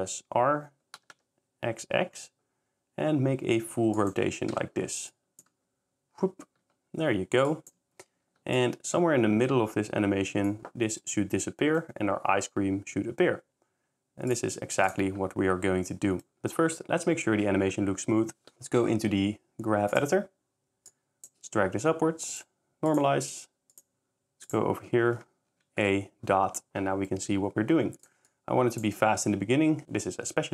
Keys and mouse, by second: 0.9 x, 1.1 x, 3.9 click, 4.5 i, 8.6 shift+click, 14.6 s, 14.9 click, 15.9 middle drag, 18.6-20.2 drag, 23.7 click, 24.4 click, 25.5 a, 28.0-28.4 drag.